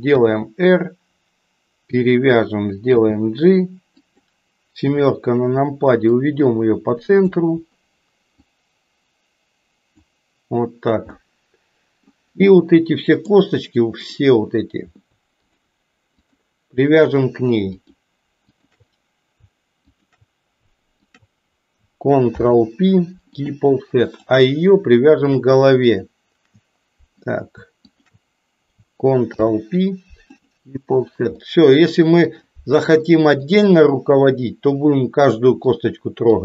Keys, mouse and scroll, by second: 0.0 r, 2.9 g, 4.9 KP_7, 6.1-7.2 drag, 8.3-10.1 drag, 11.2-12.2 middle drag, 12.5 middle click, 16.2 shift+click, 17.1 shift+click, 17.8 shift+click, 18.4 shift+click, 19.9 shift+click, 21.1 shift+click, 22.3 ctrl+p, 24.1 click, 25.1 shift+click, 27.9 shift+click, 29.3 ctrl+p, 31.4 middle click, 33.0 middle click, 35.8 middle click.